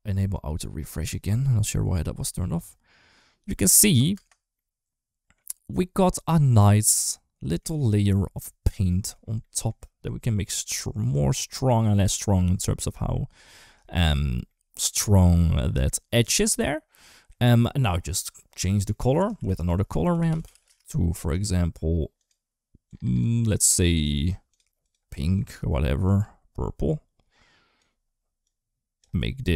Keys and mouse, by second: 1.6 shift+middle click, 1.9 space, 4.4 middle click, 4.4 space, 6.2-7.3 middle drag, 7.6 shift+middle click, 9.2 middle click, 9.7 middle click, 10.2-12.6 drag, 12.9 middle click, 13.6 shift+middle click, 14.3 middle click, 16.8 middle drag, 18.0 middle click, 19.1 shift+a, 20.4 r, 21.9 click, 22.6 click, 23.5 click, 23.7 click, 24.6 click.